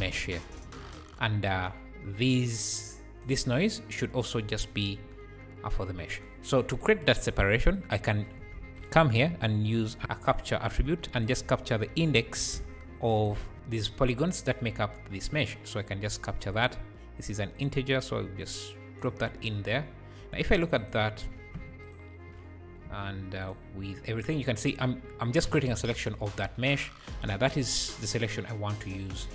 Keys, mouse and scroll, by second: 0.5 scroll down 4, 1.0-1.5 scroll up 2, 2.4-4.8 drag, 3.8 scroll down 4, 4.4 `, 5.0 scroll up 3, 5.9-6.2 scroll down 3, 7.1-7.7 scroll up 2, 7.7 click, 8.2-8.6 scroll up 3, 8.6 shift+a, 10.0 click, 10.5 scroll up 1, 10.8 shift+a, 12.9 shift+a, 13.5 ctrl+shift+click, 13.5-14.7 scroll down 1, 15.0 scroll down 2, 15.5-16.5 scroll up 1, 16.5-19.0 drag, 19.2 scroll down 5, 20.8 ctrl+shift+click, 21.8 ctrl+shift+click, 23.4 ctrl+shift+click, 26.9-27.9 scroll up 1, 27.9-29.2 drag.